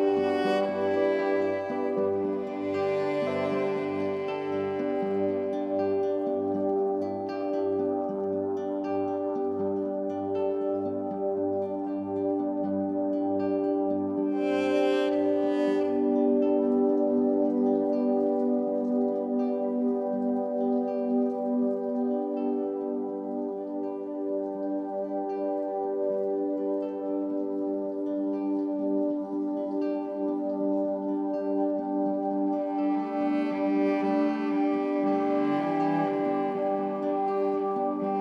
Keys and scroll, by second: 23.3 Return, 27.4 ctrl+d, 33.8 ctrl+c.